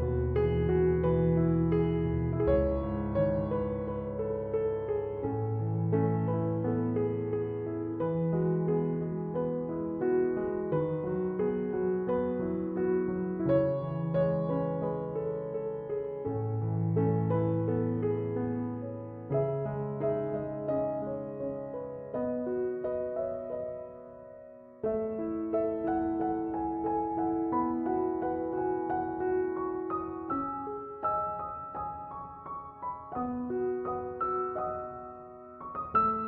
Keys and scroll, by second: 8.3 Return.